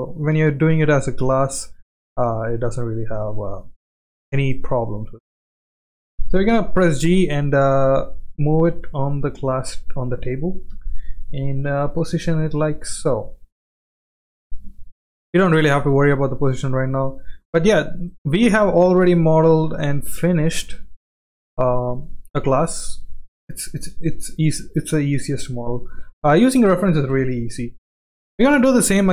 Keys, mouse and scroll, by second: 0.0 shift+middle drag, 1.2 click, 1.8 s, 4.2-4.6 shift+middle drag, 6.6 g, 8.7 g, 10.7 KP_1, 11.5 shift+middle click, 12.3 g, 14.0-14.4 middle drag, 14.8-15.1 shift+middle drag, 16.2-16.6 shift+middle drag, 17.1-18.1 middle drag, 18.4-18.8 shift+middle drag, 19.8 shift+middle drag, 20.7 g, 22.3-23.0 middle drag, 23.5-23.9 shift+middle drag, 25.7 drag, 26.0-27.1 shift+middle drag, 27.1 KP_1, 28.6 shift+middle click.